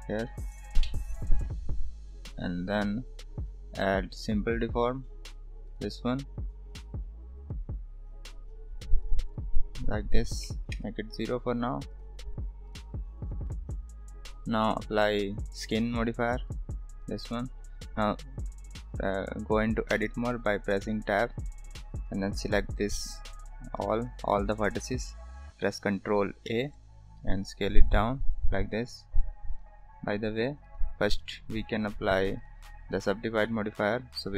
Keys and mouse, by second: 3.6-5.9 drag, 8.5 click, 10.0-11.2 drag, 11.9 click, 12.6 drag, 13.2 drag, 20.0 Tab, 21.3 click, 24.1 a, 26.5 a, 30.6 click, 31.8 Tab.